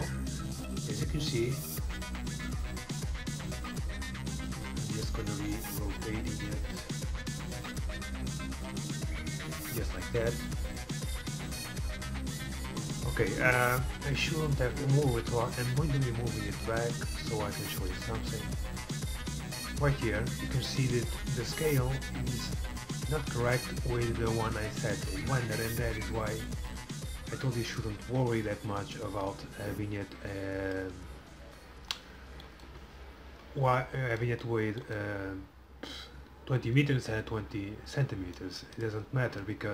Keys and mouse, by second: 37.3-39.7 middle drag.